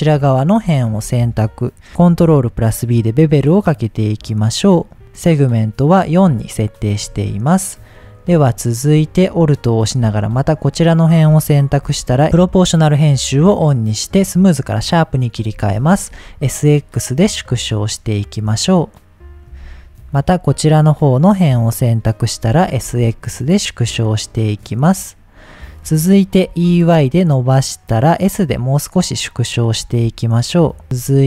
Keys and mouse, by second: 0.3 middle click, 0.8 shift+middle click, 2.1 ctrl+b, 6.8 middle click, 8.0 middle click, 9.7 alt+click, 10.9 shift+middle click, 11.8 s, 12.4 click, 12.8-14.3 drag, 14.8 middle click, 15.6 s, 16.1 x, 19.4 click, 21.0 alt+click, 22.5 s, 22.9 x, 25.2 click, 26.5 e, 26.8 y, 27.8 click, 28.4 s, 29.8 x, 30.8 middle click.